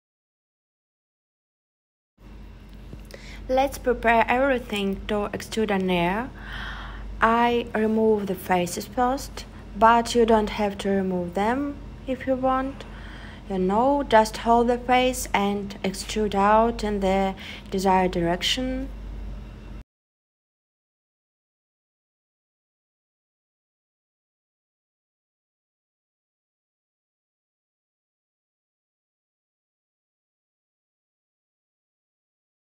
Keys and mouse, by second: 5.0 middle click, 5.6 middle click, 8.3 x, 9.5-10.9 middle drag, 13.3 alt+shift+click, 16.0 click, 22.7 click, 24.4 super+z, 26.9 click, 28.1 shift+click, 28.7 x, 31.6 click.